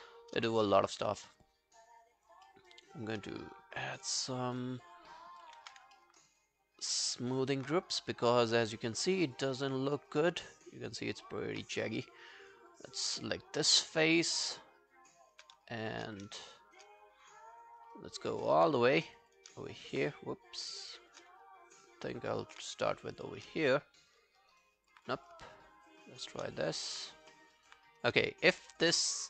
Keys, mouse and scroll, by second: 0.6 alt+click, 1.2 alt+middle click, 1.5 alt+scroll down 2, 1.7 alt+click, 2.5 alt+middle click, 2.8 alt+right click, 3.0 alt+click, 3.9 right click, 5.5 ctrl+i, 6.0 alt+middle click, 6.2 alt+right click, 6.4 alt+click, 7.3 alt+right click, 10.0 alt+middle click, 10.2 alt+right click, 10.5 alt+click, 11.3 alt+middle click, 11.8 right click, 13.6 scroll down 2, 13.8 alt+click, 14.8 alt+click, 17.0 alt+click, 17.8 alt+right click, 18.1 alt+click, 18.4 alt+right click, 19.1 shift+click, 19.3 shift+click, 19.7 alt+click, 21.4 alt+click, 22.3 alt+right click, 23.1 shift+click, 23.2 shift+click, 24.2 alt+click, 24.5 alt+right click, 24.8 alt+click, 26.2 shift+click, 26.7 alt+click, 27.3 alt+middle click, 27.6 alt+right click, 28.5 shift+click, 28.8 shift+click.